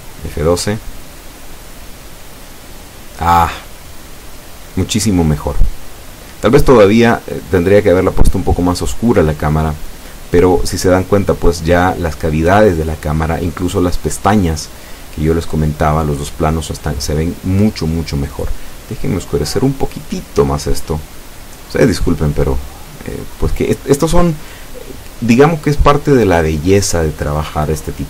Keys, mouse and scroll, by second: 0.2-2.3 drag, 5.3 click, 6.3-7.8 drag, 9.1 F12, 25.8 click, 27.1-28.0 drag.